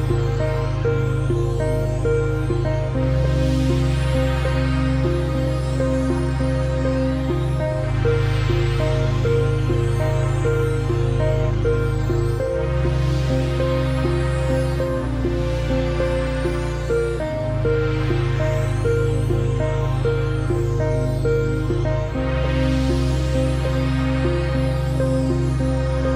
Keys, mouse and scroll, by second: 2.0 v, 2.4 click, 4.2 ctrl+shift+click, 5.5 space, 6.0 click, 7.3 g, 8.1 click, 8.9 x, 9.1 click, 10.7 z, 11.1 click, 12.6 x, 12.8 click, 13.2 ctrl+v, 13.6 ctrl+g, 14.0 scroll down 1, 14.2 click, 15.2 scroll down 1, 15.3 click, 15.6 space, 15.8 click, 16.4-16.7 alt+scroll up 2, 16.7 click, 17.7 space, 18.2 click, 19.4-22.0 typing, 22.7 ctrl+click, 24.1 click.